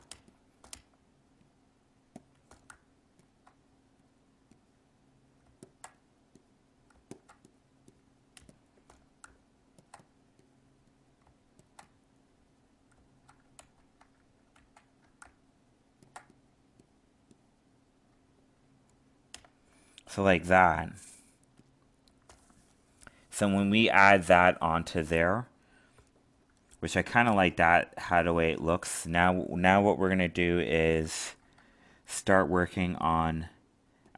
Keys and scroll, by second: 13.6 ctrl+z.